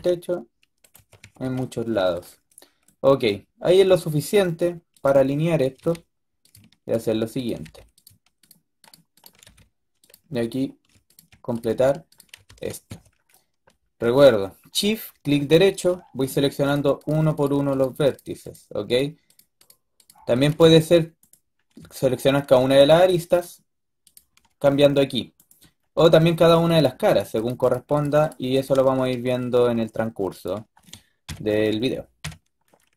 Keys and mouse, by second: 0.8 a, 1.1 a, 1.3 a, 4.5 click, 5.7 f, 7.5 f, 9.3 f, 12.3 f, 12.8 a, 13.0 middle click, 13.3 middle click, 13.6 click, 16.2-21.1 drag, 21.1-25.2 middle drag, 27.3-31.1 middle drag, 28.8 a, 32.1 KP_3.